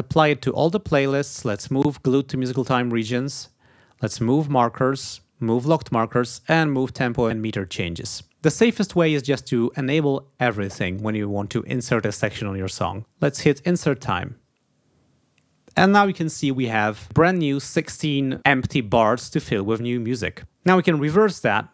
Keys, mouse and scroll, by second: 0.0 click, 4.1 click, 5.5 click, 6.8 click, 13.4 click.